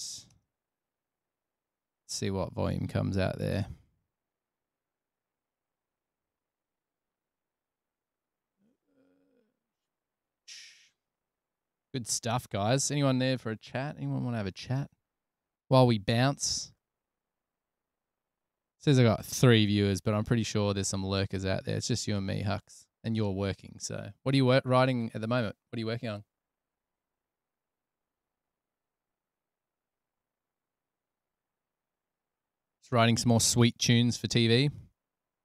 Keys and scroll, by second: 0.7 Return, 2.3 Return, 4.3 super+Tab, 7.4 super+Tab.